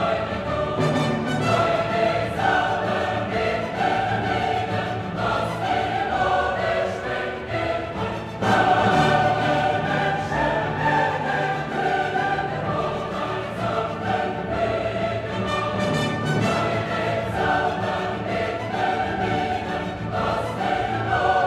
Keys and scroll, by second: 1.0 ctrl+d.